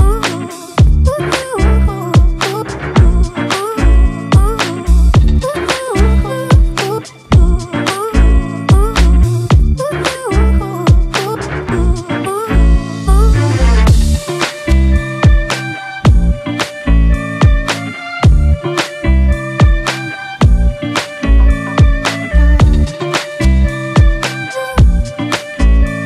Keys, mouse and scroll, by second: 0.7 double click, 23.9 ctrl+t.